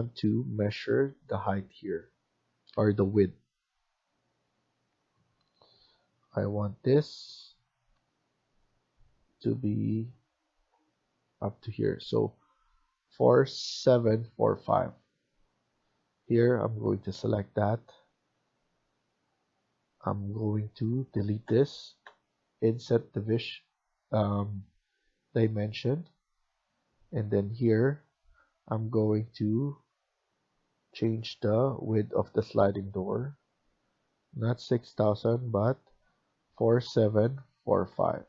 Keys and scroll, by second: 7.9 Tab, 10.0 Tab, 10.6 Tab, 14.2 Escape, 14.4 Escape.